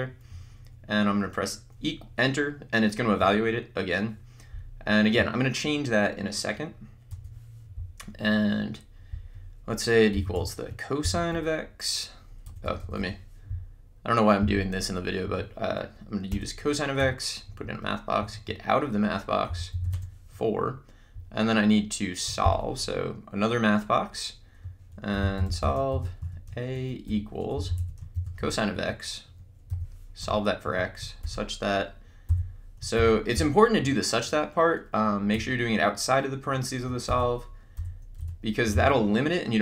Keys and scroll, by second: 3.1 Return, 7.1 BackSpace, 9.2-11.1 typing, 12.5 BackSpace, 15.3 Right, 16.3 Return, 17.0 x, 17.5 Right, 19.2-20.3 typing, 22.8 m, 24.9-30.2 typing, 30.7 Right, 32.3 0, 33.3 =, 35.4 x, 37.5-39.3 typing.